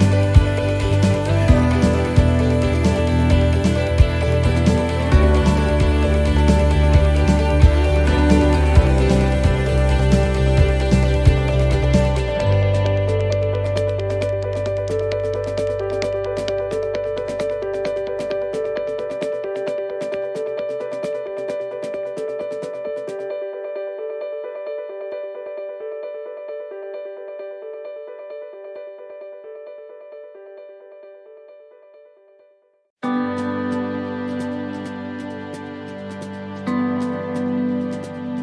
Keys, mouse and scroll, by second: 0.0 alt+shift+right click, 0.0 e, 0.6 s, 2.4 middle click, 3.1 shift+middle click, 3.2 shift+s, 5.5 ctrl+r, 10.1 alt+shift+right click, 10.1 e, 10.6 s, 11.8 shift+middle click, 13.7 ctrl+r, 16.5 alt+shift+right click, 17.8 s, 19.3 e, 20.0 s, 20.9 shift+middle click, 23.3 ctrl+r, 23.3 shift+middle click, 27.7 alt+shift+right click, 27.7 e, 28.1 s, 31.2 middle click, 31.2-31.6 scroll down 2, 31.8 shift+middle click, 32.5 middle click, 33.0 shift+middle click, 33.9-34.6 scroll up 5, 34.6-35.0 scroll down 1.